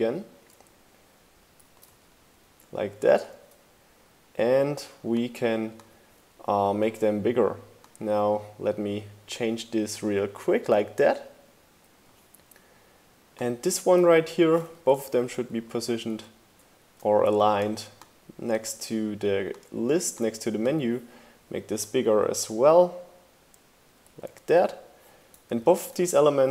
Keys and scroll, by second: 1.3 super+v, 1.9 shift+Down, 14.5 shift+Left, 16.2 shift+Right.